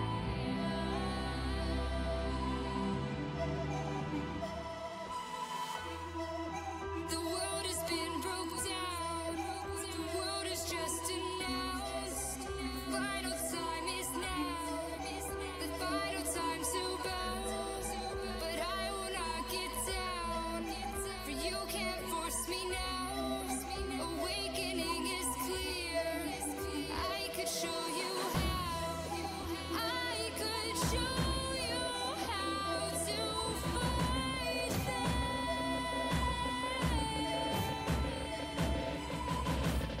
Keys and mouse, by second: 0.2 shift+g, 1.3 g, 3.4 g, 8.9 g, 11.7 g, 13.3 g, 15.2 g, 18.1 g, 19.7 g, 21.2 g, 24.7-26.7 middle drag, 26.7-30.8 right drag, 29.2-35.1 drag, 32.1-34.9 right drag, 35.1-40.0 right drag.